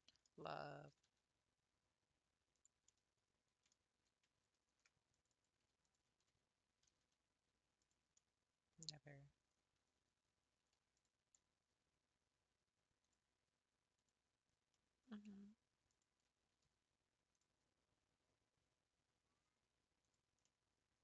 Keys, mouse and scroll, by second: 0.9 g, 2.9-4.6 middle drag, 4.6 ctrl+r, 6.4 scroll up 1, 6.9 g, 8.1-10.0 middle drag, 10.0 3, 14.1 click, 14.7-16.0 middle drag, 20.1 click, 20.4-21.0 middle drag.